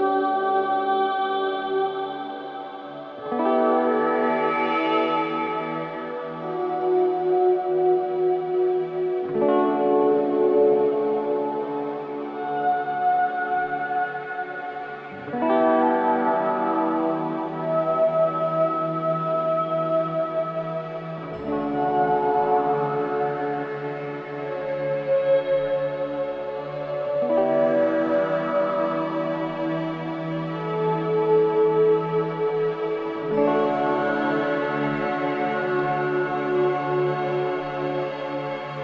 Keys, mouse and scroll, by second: 0.0 click, 0.5 middle click, 1.1-1.7 scroll down 5, 1.7-3.8 middle drag, 3.8-4.4 scroll up 1, 5.1-5.7 scroll up 1, 6.4-8.0 middle drag, 8.0-8.4 scroll down 1, 9.7-10.1 scroll up 2, 11.5 scroll up 1, 12.4 click, 16.1 l, 17.2 click, 18.2 shift+click, 20.2 click, 21.5 ctrl+z, 21.9-22.3 middle drag, 22.3-22.6 scroll down 2, 22.6-23.1 middle drag, 23.1 scroll down 1, 23.4-24.9 middle drag, 25.3-26.8 middle drag, 28.2-29.7 middle drag, 35.0 l, 35.5 click, 37.4 click.